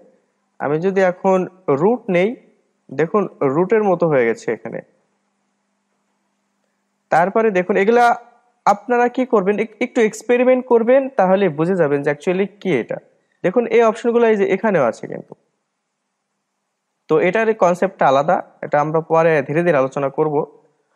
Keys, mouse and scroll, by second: 0.9-4.0 drag, 14.7-17.7 drag.